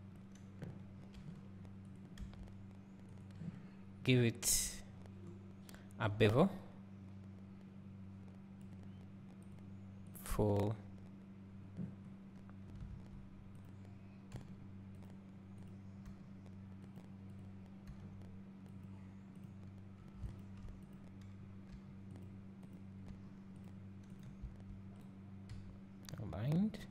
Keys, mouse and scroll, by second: 1.2 g, 2.3 s, 3.2 click, 7.5-13.7 drag, 12.3 scroll, 12.9 Tab, 14.4 g, 15.7 click, 16.1 g, 17.4 click, 17.9 g, 19.5 click, 20.4 shift+click, 20.9 click, 21.7 g, 22.7 click, 23.1 g, 24.1 click, 24.4 s.